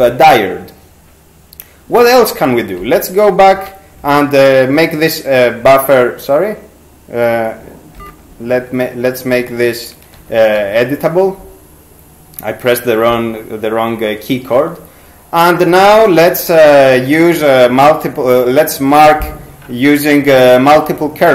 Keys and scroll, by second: 2.8 ctrl+c, 3.6 ctrl+q, 8.0 ctrl+g, 10.2 ctrl+x, 10.6 ctrl+q.